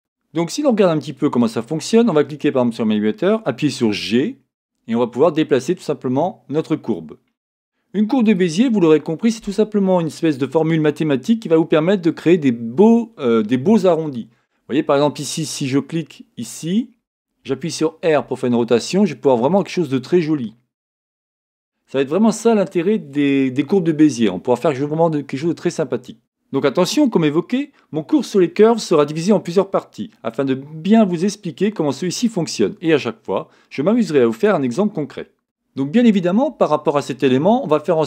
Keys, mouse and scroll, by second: 1.8 click, 3.9 g, 8.3 click, 16.4 click, 18.0 r, 19.6 click.